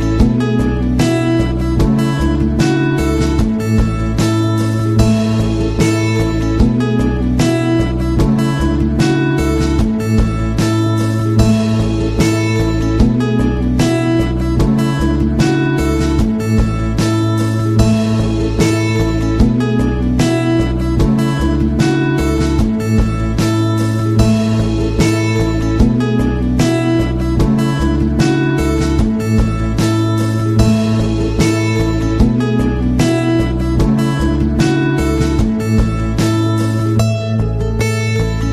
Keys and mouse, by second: 0.0 Tab, 0.5 shift+middle click, 1.1 KP_3, 1.6 shift+middle click, 2.7 Tab, 3.2 g, 4.5 KP_1, 5.1 Tab, 6.3 shift+middle click, 7.6 alt+right click, 8.9 c, 11.2 KP_3, 11.8 shift+middle click, 13.1 shift+middle click, 13.4 middle click, 14.4 c, 16.0 z, 33.7 z, 35.8 Tab, 36.3 z, 37.6-38.0 middle drag.